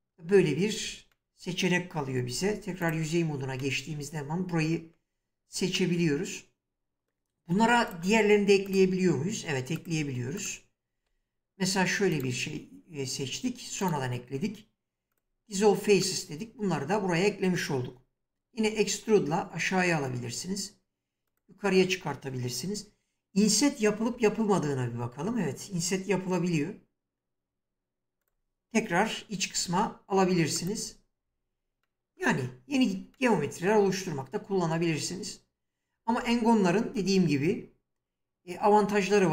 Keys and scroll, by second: 2.4 3, 18.5 e, 24.0 l, 29.5 e, 32.4 Tab.